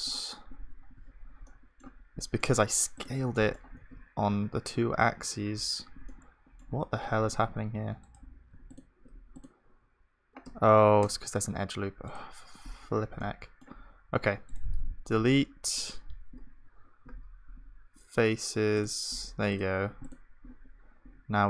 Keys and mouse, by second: 1.5-2.7 drag, 1.5-5.3 middle drag, 1.5-2.7 right drag, 3.5-5.3 drag, 3.5-5.3 right drag, 3.8 g, 6.1-13.2 middle drag, 7.1 g, 10.4 Tab, 10.4-13.2 drag, 13.2-16.5 right drag, 17.0 Delete, 20.3-21.4 drag.